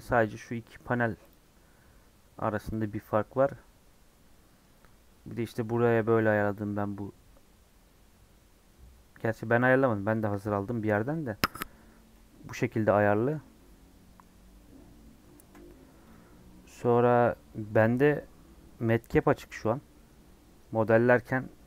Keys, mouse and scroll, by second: 13.5 middle click, 14.2-14.9 scroll up 3, 14.9 scroll down 1, 15.0-16.0 middle drag, 16.0 shift+a, 16.3 scroll down 4, 16.5 middle click, 16.7-17.6 scroll up 8, 17.6-19.5 middle drag, 19.5-21.6 drag.